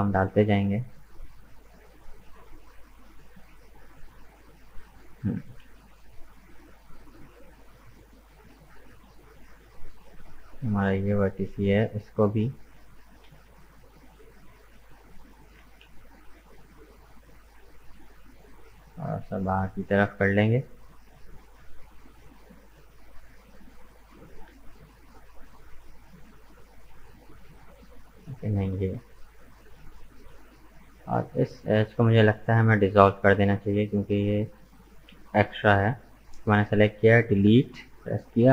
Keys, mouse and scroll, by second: 0.2 Tab, 0.4 middle click, 1.3-1.8 scroll up 2, 1.8-7.8 middle drag, 10.1 click, 10.8 right click, 11.2-12.7 middle drag, 12.7 g, 15.6 g, 18.4-21.4 middle drag, 22.4-22.7 scroll down 1, 22.7-24.7 middle drag, 24.7 alt+right click, 25.6-28.2 middle drag, 28.2 alt+right click, 28.8 right click, 30.1 click, 31.0 right click, 31.5 shift+right click, 32.0 shift+right click, 32.4 middle click, 33.2 shift+right click, 33.7 shift+right click, 34.3 shift+right click, 34.8 shift+right click, 35.2 scroll down 2, 35.5-37.3 middle drag, 37.3 Delete.